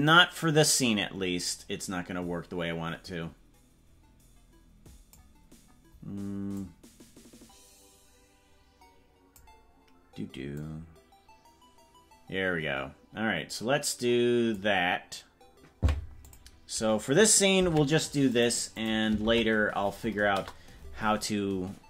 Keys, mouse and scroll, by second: 6.5-9.4 drag, 10.5-14.5 drag, 16.2-18.4 drag, 18.8-20.8 drag.